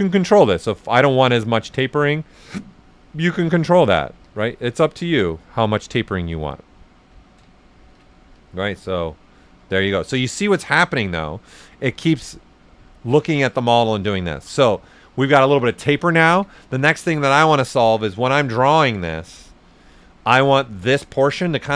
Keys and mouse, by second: 2.7 click, 3.6 right click, 4.2 ctrl+z, 4.7 click, 5.4-7.8 right drag, 7.8 ctrl+z, 8.3 click, 9.1 right click, 9.7 ctrl+z, 10.1 alt+right click, 10.7 click, 11.3-12.9 right drag, 12.9 right click, 13.4 alt+shift+right click, 16.2 ctrl+z, 17.3 right click, 18.6 click, 19.6 right click, 20.4 shift+right click.